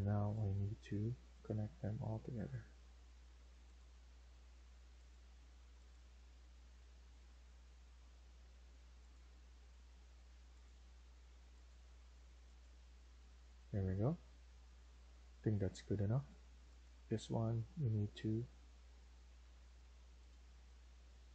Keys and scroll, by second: 3.7 Escape, 5.7 Escape, 9.9 Escape, 14.3 Escape, 15.7 Escape, 16.0 Escape, 19.3 Delete.